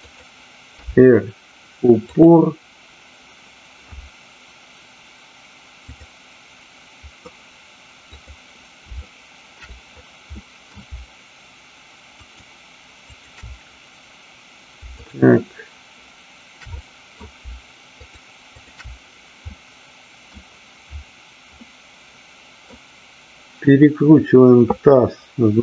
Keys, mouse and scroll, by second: 0.0 click, 0.7 r, 2.0 click, 8.0-8.7 drag, 9.0-9.5 shift+middle drag, 10.4 middle click, 13.0 shift+click, 16.7-17.1 middle drag, 17.9-18.4 shift+drag, 18.5 shift+click, 19.5-20.4 middle drag, 21.7-22.7 middle drag.